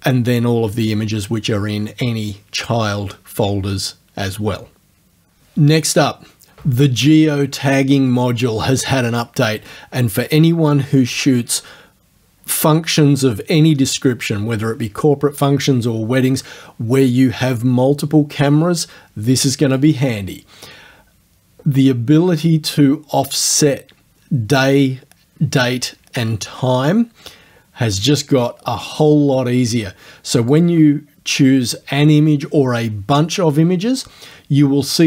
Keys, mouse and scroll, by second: 19.7 click, 30.5 click.